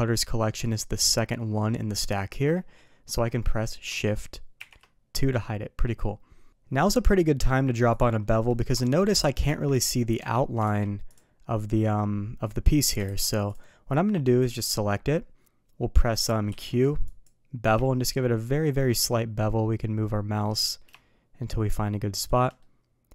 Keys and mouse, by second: 4.6 shift+2, 5.2-5.8 middle drag, 7.9 click, 9.5 Tab, 10.2 Tab, 10.6 alt+v, 14.4 click, 16.5 q, 22.6-23.1 middle drag.